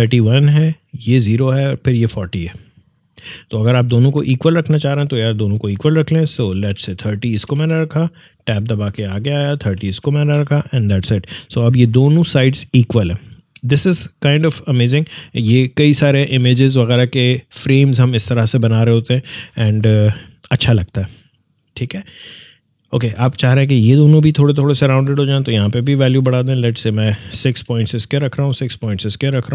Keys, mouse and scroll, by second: 5.5 click, 5.6 click, 6.6 typing, 7.3 Tab, 8.8-9.6 typing, 10.2 Return, 11.5-16.6 drag, 21.5-24.5 drag, 25.1 click, 27.4 6, 28.3 click, 28.6 6.